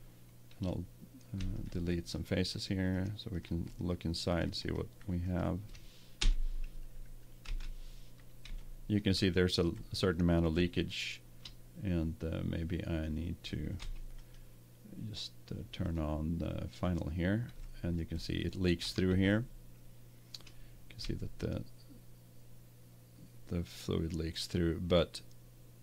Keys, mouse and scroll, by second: 1.7 right click, 4.4-7.0 right drag, 6.2 Delete, 8.6 middle click, 10.3-12.0 middle drag, 13.0 middle click, 13.8 Tab, 13.8 middle click, 14.1-15.8 middle drag, 16.2-17.2 drag, 17.7-19.3 middle drag, 20.1 middle click, 25.0-25.8 middle drag.